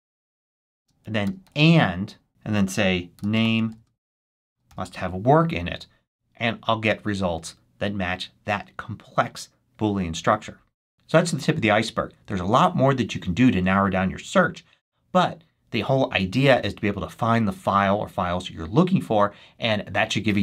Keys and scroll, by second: 0.7-5.1 typing.